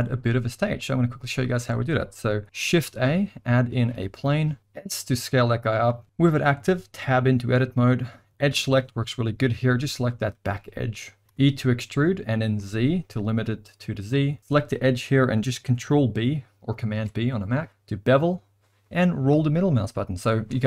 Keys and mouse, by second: 1.6 space, 2.0 middle click, 2.7 shift+a, 4.6 s, 6.6 Tab, 8.3 click, 9.9 click, 10.4 middle click, 13.9 e, 16.9 ctrl+b.